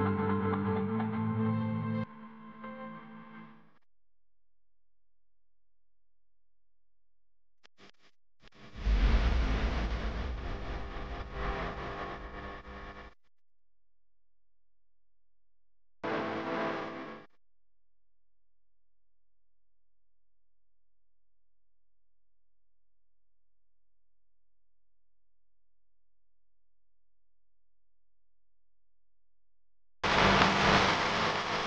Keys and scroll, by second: 0.4 space, 1.2 space, 1.7 space, 3.3 Right, 4.5 Right, 5.1 space, 5.6 space, 5.7 space, 6.7 Left, 9.4 Right, 9.8 Right, 10.4-11.4 space, 14.1 Left, 16.4 Left, 16.7 Left, 17.7 space, 19.1 Right, 19.4 Right, 20.0 space, 20.5 space, 21.9 Left, 23.6 Left, 25.5-26.7 typing, 26.0 alt+super+space, 27.4 Tab, 27.7 Tab, 28.5-31.6 typing, 30.7 super+space, 30.7 super+space.